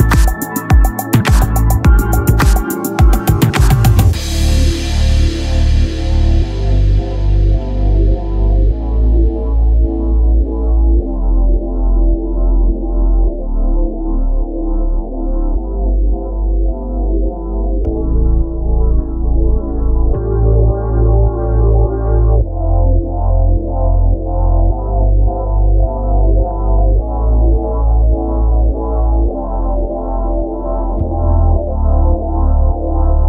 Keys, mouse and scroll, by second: 0.3 s, 2.0 KP_1, 4.5-6.2 drag, 6.2 Tab, 6.8 e, 9.6 a, 11.1 s, 11.9-13.2 drag, 13.2 s, 14.5 click, 15.2-17.5 right drag, 17.5 Tab, 17.5 x, 21.0 KP_0, 21.0 shift+q, 29.2-33.2 drag, 29.2-30.7 right drag.